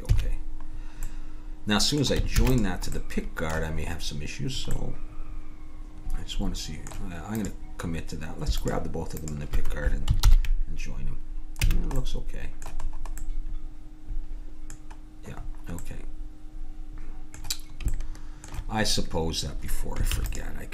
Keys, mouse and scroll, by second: 0.1 a, 2.4 ctrl+s, 7.4-10.8 drag, 10.2 ctrl+j, 10.2 ctrl+h, 11.7 a, 20.1 ctrl+s.